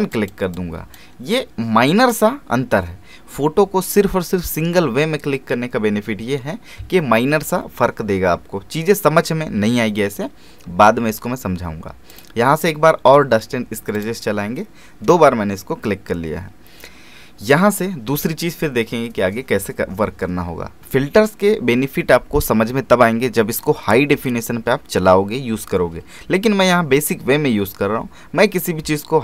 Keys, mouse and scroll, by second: 12.1 click.